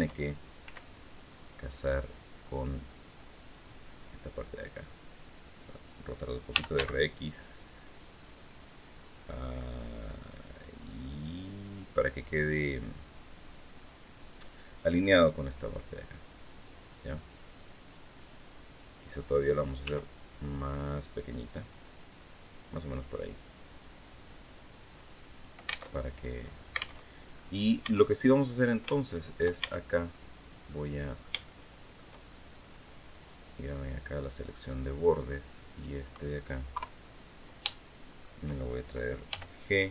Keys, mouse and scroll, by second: 0.4 s, 1.5 click, 2.4-3.4 drag, 4.3-5.6 drag, 6.0-7.0 typing, 13.9 click, 16.0-17.0 drag, 17.6-18.9 drag, 19.6 s, 21.6 click, 22.8 click, 24.3-25.3 drag, 25.6 alt+Tab, 26.8 alt+Tab, 27.1-27.5 alt+scroll up 1, 27.6 Tab, 28.1 right click, 28.7 shift+middle click, 29.3 shift+Tab, 29.8 shift+scroll up 3, 30.4 middle click, 31.2 shift+middle click, 33.2 click, 34.4 right click, 36.5 KP_3, 37.4 shift+click, 39.0 g.